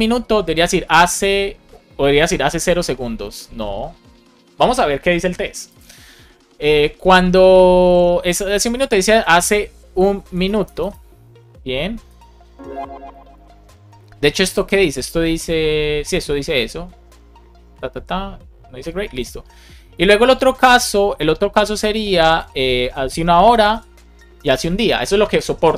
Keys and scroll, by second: 21.8 super+c, 23.4 Return, 23.6 super+v, 24.3 Return, 24.6 super+v.